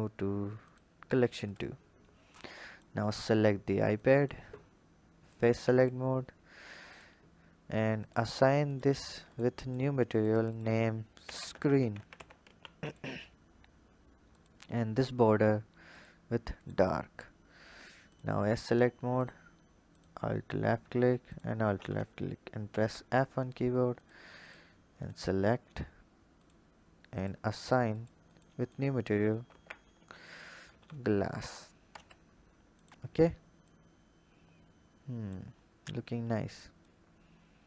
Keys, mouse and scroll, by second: 1.3 click, 2.2 click, 2.8 Tab, 3.8-5.3 drag, 5.6 click, 6.7 click, 7.8-11.8 drag, 11.8 e, 14.1 alt+click, 15.7 click, 16.3-18.0 drag, 18.9 alt+click, 19.7 alt+click, 21.0 alt+shift+click, 22.5 f, 23.8 click, 24.3 click, 24.8 click, 26.2-30.6 drag, 30.6 s, 31.7 Tab, 32.1-32.6 scroll down 3, 32.6 click, 33.5 click, 35.3-35.8 scroll up 3, 36.6 click.